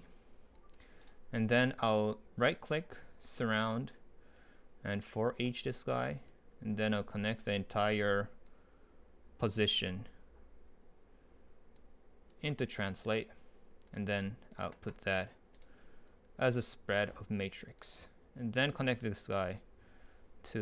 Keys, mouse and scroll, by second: 1.1-3.5 right drag, 3.5-8.7 drag, 11.8-15.6 drag, 15.6-18.7 right drag, 18.7-20.5 drag, 20.5-20.6 scroll down 2.